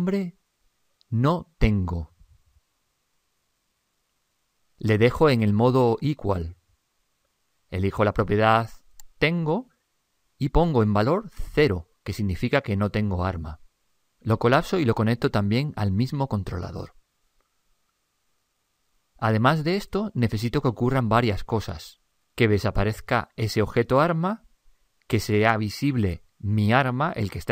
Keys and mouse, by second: 0.2 click, 1.1 click, 5.2-6.9 middle drag, 6.9 click, 9.4 click, 15.1-18.0 drag.